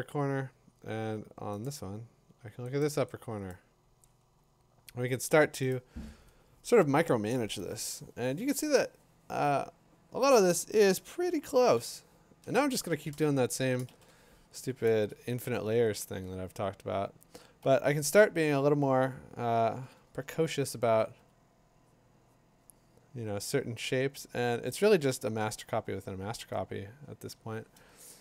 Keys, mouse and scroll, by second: 1.6 click, 2.8 click, 3.5 click, 5.7 click, 11.8 b, 13.9 ctrl+shift+n, 17.9 ctrl+Return, 19.0 click, 21.2 click.